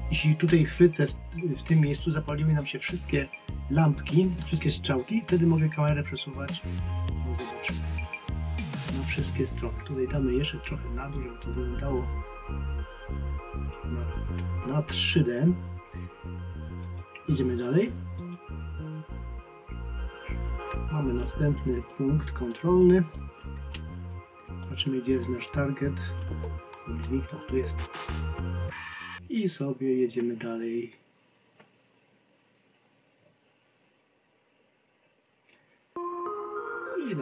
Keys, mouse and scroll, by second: 3.8 click, 16.8 click.